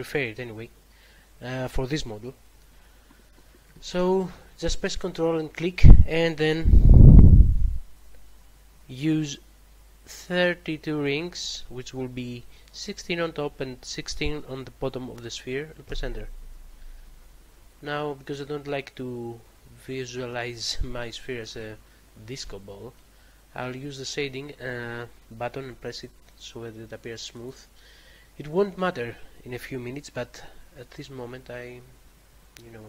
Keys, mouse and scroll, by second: 5.1 ctrl+click, 11.1 typing, 15.8 Return, 21.1 middle click, 27.3 click, 31.1 middle click.